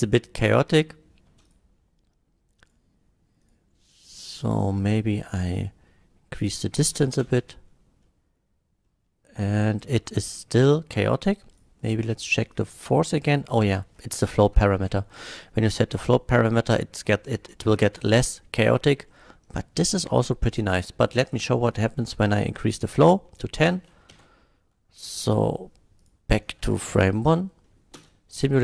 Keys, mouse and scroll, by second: 1.4 space, 1.4 click, 2.7 click, 3.4 click, 4.6 click, 5.5 click, 6.9 shift+Left, 7.2 space, 8.0-8.4 middle drag, 8.9-9.9 middle drag, 10.4 middle drag, 11.5 click, 12.5 click, 13.7 space, 14.8 F12, 19.1 middle click, 21.3 click, 22.4 click, 23.2 middle drag, 24.2 shift+Left, 25.2 middle click, 26.0 click, 26.4 middle drag, 26.9 shift+Left, 27.7 middle click, 27.9 shift+l.